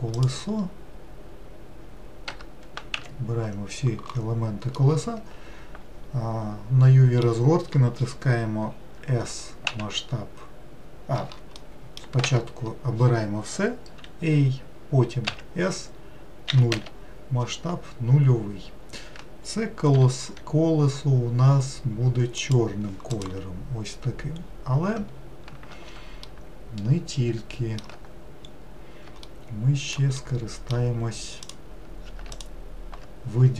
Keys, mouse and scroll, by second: 2.4 Tab, 3.1 a, 15.4 s, 20.1 g, 23.3 click, 24.6-25.3 scroll up 1, 25.3-26.1 scroll up 1, 26.8-28.5 shift+middle drag, 28.5-29.2 scroll up 1, 29.4-31.6 shift+middle drag, 31.6 click.